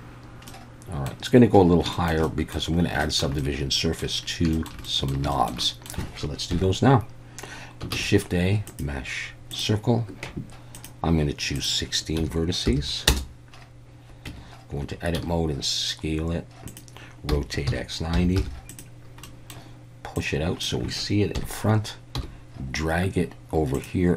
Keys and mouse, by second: 0.5-1.1 middle drag, 1.9 shift+middle click, 2.2 middle drag, 3.0 shift+middle click, 3.4-4.0 middle drag, 4.6 shift+middle click, 4.9 middle click, 5.3 shift+middle drag, 5.6 middle drag, 6.5 KP_1, 7.9 shift+a, 10.7 click, 11.5-13.5 drag, 14.3 Tab, 15.1 s, 16.7 click, 17.3 r, 17.7 x, 18.2 9, 18.4 0, 18.7 click, 19.3 middle click, 20.2 click, 21.4 KP_1, 22.2 g, 23.7 click.